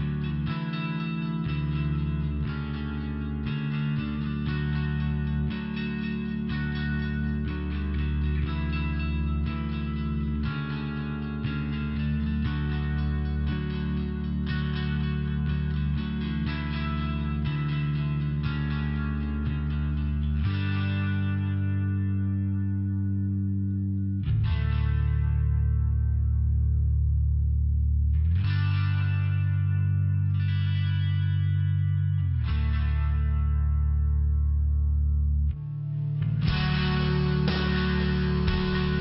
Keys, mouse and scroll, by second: 0.5 click, 3.4 click, 3.6 click, 4.0 click, 4.1 click, 4.6 click, 4.7 click, 5.2 click, 5.3 click, 5.7 click, 5.9 click, 6.6 click, 6.7 click, 7.3 click, 8.6 click, 8.7 click, 9.1 click, 9.2 click, 9.6 click, 9.8 click, 10.4 click, 10.5 click, 10.9 click, 11.1 click, 11.6 click, 11.8 click, 12.2 click, 12.3 click, 12.7 click, 12.8 double click, 13.6 double click, 13.8 double click, 14.2 click, 14.3 click, 14.8 click, 14.8 click, 15.5 click, 15.6 click, 16.9 click, 20.2 click, 20.3 click, 20.7 click, 20.9 click, 21.2 click, 21.3 click, 21.6 click, 21.7 double click, 22.1 double click, 22.3 double click, 22.7 double click, 23.2 click, 23.4 click, 23.8 click, 23.9 click, 24.2 click, 24.3 click, 24.7 click, 24.8 double click, 25.3 double click, 25.4 double click, 25.8 click, 26.0 click, 26.3 click, 26.4 click, 26.8 click, 26.9 click, 27.2 click, 27.4 click, 27.8 click, 27.9 click, 28.2 click, 28.3 click, 28.6 click, 28.8 click, 29.3 click, 29.4 click, 29.9 click, 30.0 click, 30.4 click, 30.5 click, 31.0 click, 31.1 click, 31.7 click, 34.5 click, 34.7 click, 35.0 click, 35.2 click, 35.7 click, 35.8 click, 36.2 click, 36.3 click, 36.8 click, 37.3 click, 37.4 click, 37.8 click, 38.0 click, 38.6 click, 38.7 click.